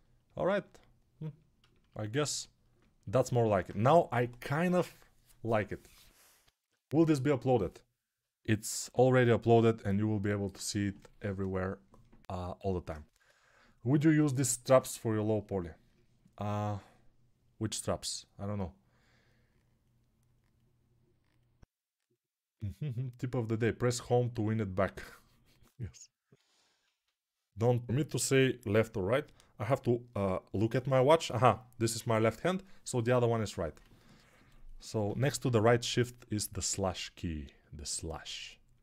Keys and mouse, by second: 0.0-38.8 typing, 8.9 ctrl+s.